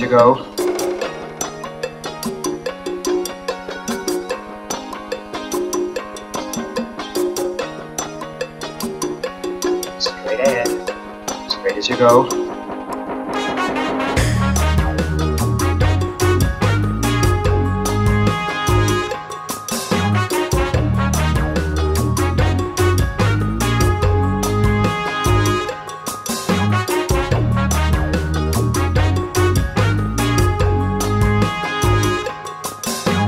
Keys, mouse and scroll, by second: 2.4-3.4 drag, 3.4-5.1 middle drag, 6.2 click, 11.1 click, 11.9 click, 13.8 click, 15.8-21.6 drag, 26.3 click.